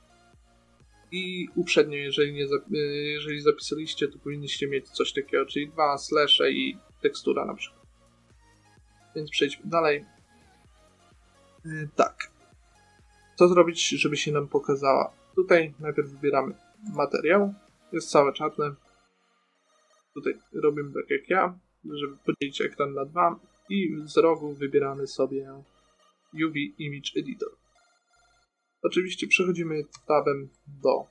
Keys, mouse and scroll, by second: 0.0-1.7 drag, 1.7-3.4 middle drag, 3.4-5.2 drag, 10.0 click, 13.0-14.1 middle drag, 15.3-16.3 drag, 16.6 click, 18.8-22.2 right drag, 28.0-29.2 middle drag, 30.4 Tab.